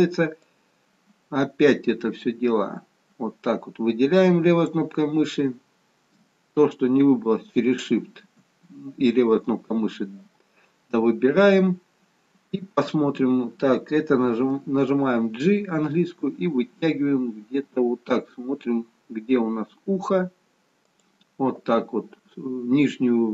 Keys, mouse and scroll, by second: 0.4 click, 7.1 shift+click, 14.6 g.